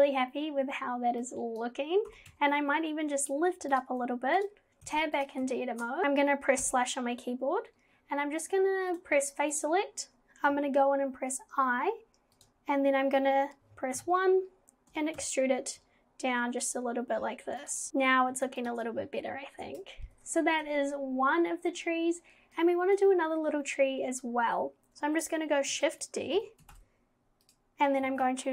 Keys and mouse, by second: 1.4 click, 2.1 g, 4.9 Tab, 6.6 /, 8.9 click, 10.5 i, 14.0 KP_1, 14.9 e, 17.6 z, 17.7 z, 17.9 /, 18.3 Tab, 22.7 drag, 25.7 shift+d, 26.4 g, 28.0 g.